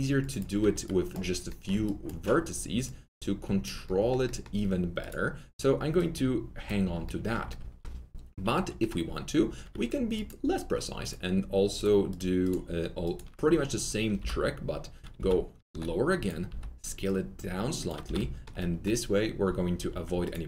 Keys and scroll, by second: 9.6 2, 14.1 ctrl+r, 15.1 w, 16.4 shift+r, 17.7-18.5 typing.